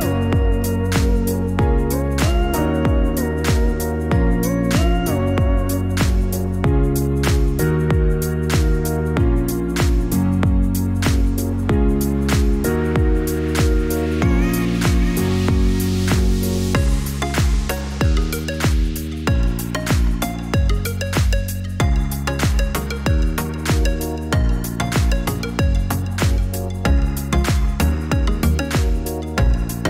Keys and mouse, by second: 6.7-11.0 drag, 12.5 click, 17.7 click, 19.8 alt+shift+click, 21.7 click, 22.3 click, 23.1 click, 25.1 alt+shift+click.